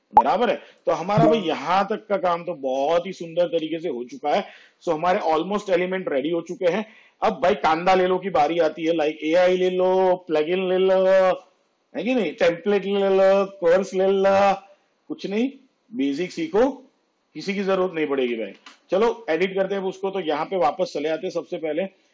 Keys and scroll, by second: 3.5 space, 18.7 space.